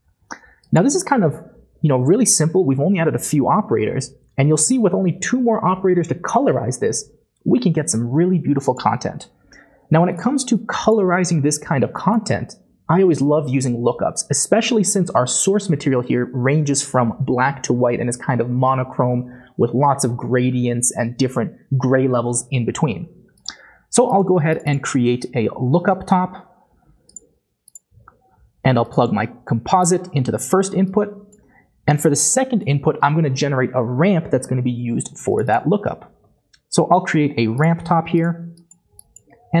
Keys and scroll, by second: 25.5 typing, 36.1-37.7 typing.